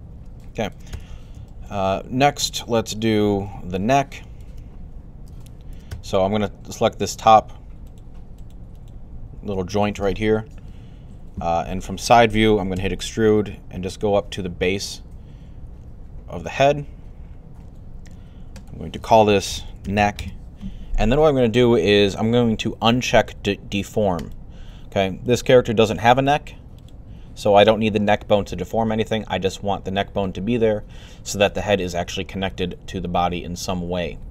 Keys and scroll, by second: 10.9 3, 12.4-13.1 typing, 19.1-20.3 typing.